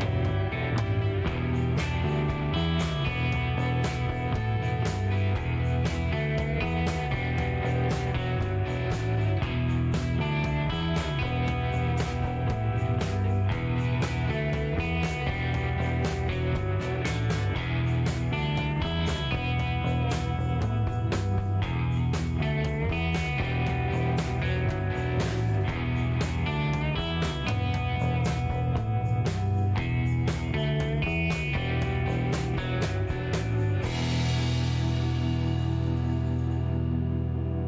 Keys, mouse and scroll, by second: 1.5 shift+right click, 2.3 scroll up 2, 2.8 middle click, 4.0 click, 5.0 click, 5.9 shift+right click, 6.9 middle click, 8.5 click, 10.6 click, 13.4 click, 14.4 right click, 15.8 click, 18.4 click, 19.5 click, 20.8-21.6 scroll up 3, 21.8-23.4 scroll up 8, 23.6 scroll up 2, 24.5 scroll up 2, 25.6 scroll up 1, 28.3 scroll up 1, 34.6 scroll up 1, 35.9 click, 36.8 shift+right click, 37.5 shift+middle click.